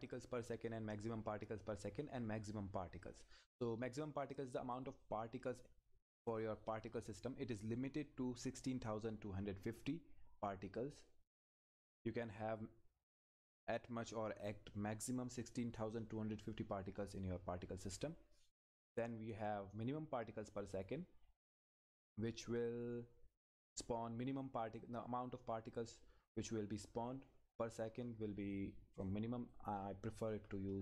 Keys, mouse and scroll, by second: 20.5 click, 24.1-25.1 scroll up 1, 29.0 click.